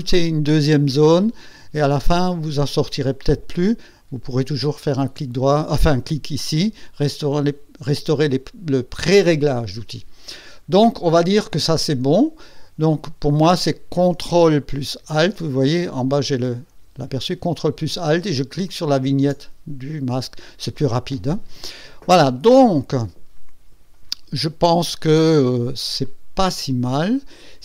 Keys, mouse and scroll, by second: 18.6 ctrl+alt+click, 26.0-27.6 drag.